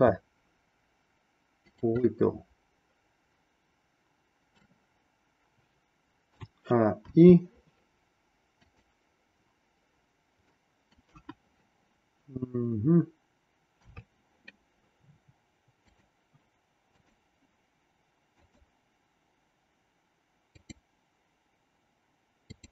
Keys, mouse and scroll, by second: 2.1-4.7 middle drag, 6.3 a, 7.1 i, 8.7 click, 10.4 middle click, 11.2 KP_1, 13.7 KP_3, 15.8 click, 16.9 click, 18.3 click, 20.5 click, 22.4 click.